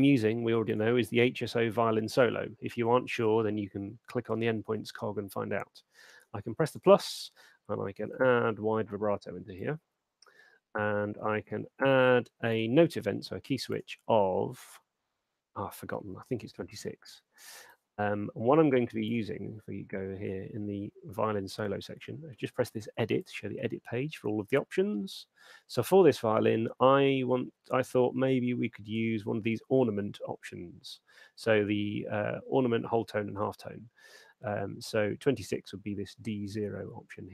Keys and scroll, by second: 7.9 w, 8.5 e, 16.3-17.1 typing, 17.4 Tab.